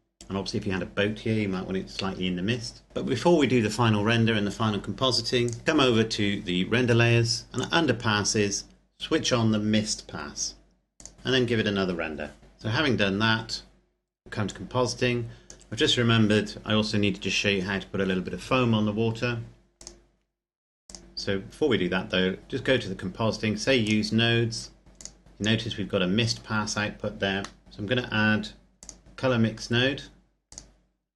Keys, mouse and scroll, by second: 5.5 click, 7.6 click, 11.1 click, 14.8 click, 19.9 click, 22.4 click, 23.2-24.1 scroll up 1, 24.1 click, 24.8-25.1 scroll up 1, 25.1 click, 26.8-27.6 scroll down 1, 27.6 click, 30.7 click.